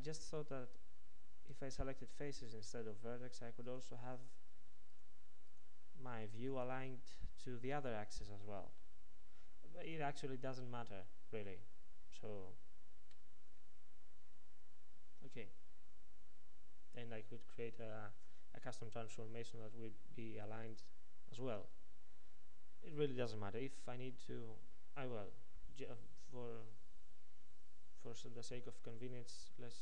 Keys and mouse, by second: 1.7 ctrl+Tab, 3.7-8.1 drag.